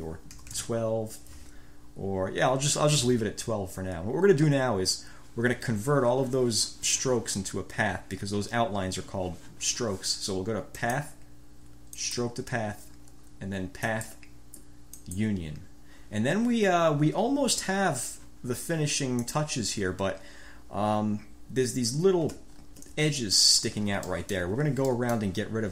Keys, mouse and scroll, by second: 0.5 1, 0.7 Return, 11.0-11.3 scroll up 2, 12.2-12.5 scroll up 2, 14.0 click, 15.1 click, 19.3 click, 22.7 ctrl+scroll up 2, 24.2 click, 24.6 1, 25.0-25.5 drag.